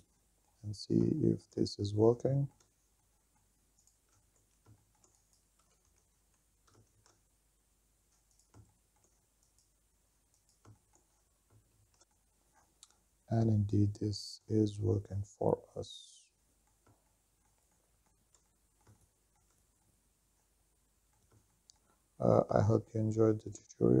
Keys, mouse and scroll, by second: 0.0-0.9 drag, 0.9-1.3 scroll down 3, 1.4 shift+middle drag, 1.8-2.2 middle drag, 2.5 shift+middle click, 3.2-3.6 middle drag, 4.0 right click, 4.3 Tab, 4.6 shift+middle click, 4.8 click, 5.2 g, 5.7 shift+z, 6.6 shift+middle click, 6.9 click, 7.4 click, 7.6 shift+middle click, 7.8 e, 8.1 shift+z, 8.5 click, 8.8 middle click, 9.3 click, 10.2 e, 10.5 shift+z, 11.0 click, 11.7 click, 12.1 middle click, 12.7-13.3 scroll up 1, 13.3 middle click, 13.3 scroll up 1, 14.0 shift+middle click, 14.7 shift+middle click, 15.7 scroll up 2, 16.0-17.4 middle drag, 17.4-17.9 shift+scroll down 1, 18.1 shift+middle click, 18.9 middle click, 20.5-21.7 middle drag, 21.8-24.0 shift+middle drag, 21.8-22.5 scroll down 3.